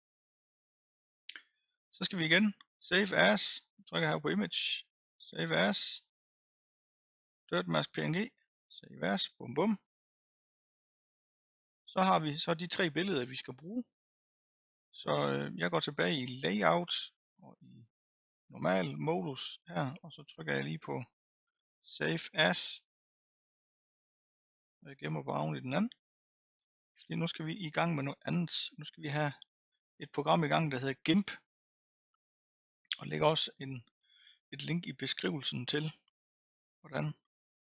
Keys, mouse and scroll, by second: 5.7-8.9 drag, 15.8 click, 18.2-18.6 drag, 19.1-23.0 scroll up 1, 23.0-25.3 drag.